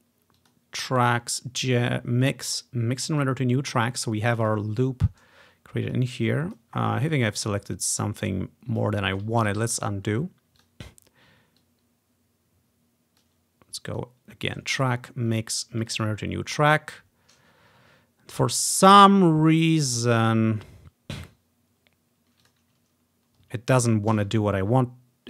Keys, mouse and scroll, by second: 0.4 click, 3.2 click, 3.9-4.2 scroll down 2, 4.5 click, 6.0 click, 6.9 ctrl+scroll down 1, 8.1 click, 9.5 ctrl+click, 9.7 ctrl+z, 10.1-10.7 scroll up 1, 10.7 click, 11.7-13.3 drag, 16.5 scroll down 1, 17.6-17.9 scroll up 2, 21.3 scroll down 2, 22.6 ctrl+click, 24.2 ctrl+z.